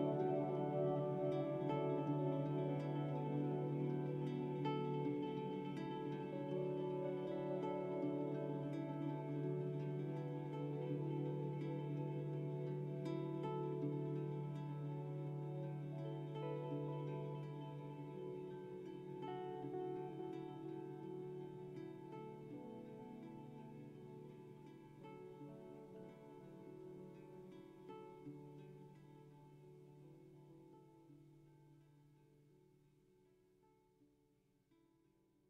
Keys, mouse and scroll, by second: 0.9 Tab, 1.2-2.6 middle drag, 2.6 KP_0, 3.2-4.7 scroll up 1, 6.2 scroll up 1, 18.5-20.0 middle drag, 20.2-20.6 scroll up 4, 22.9-24.0 middle drag, 23.7-25.2 scroll down 3, 26.6 ctrl+s, 28.7-30.3 middle drag, 31.4-34.8 middle drag, 34.8 ctrl+z.